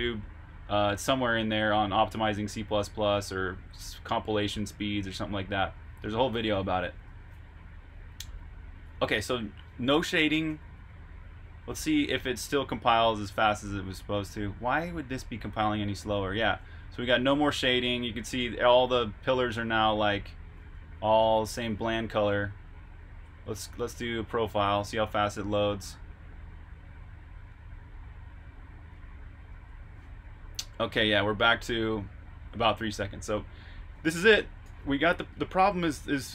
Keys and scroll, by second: 6.8-7.7 typing, 10.4 super+r, 10.7-11.6 typing, 16.6-19.9 typing, 21.1 super+q, 22.0 super+Tab, 29.5 super+q, 33.2 super+Tab, 34.5 typing, 35.7 typing.